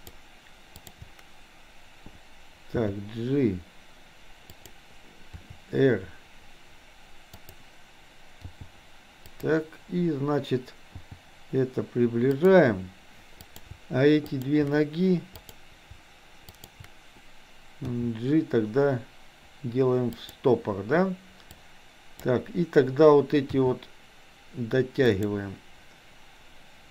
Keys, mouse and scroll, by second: 0.0 shift+click, 0.9 shift+click, 2.7 g, 5.5 r, 8.4 g, 11.0 g, 13.5 click, 14.4 shift+click, 15.4 click, 16.6 shift+click, 17.9 g, 21.6 click, 23.5 r.